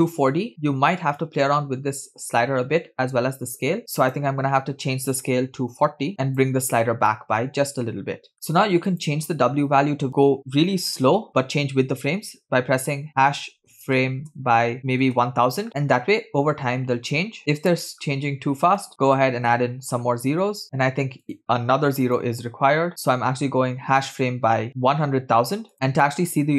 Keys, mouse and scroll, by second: 2.0 click, 3.8 ctrl+z, 4.5-6.9 drag, 7.4-8.3 middle drag, 8.3-8.9 scroll up 2, 8.9-15.6 drag, 14.8 0, 15.7 space, 17.3 space, 17.4 Right, 18.9 click, 18.9 0, 20.6 space, 21.8-22.9 drag, 23.3-25.7 drag.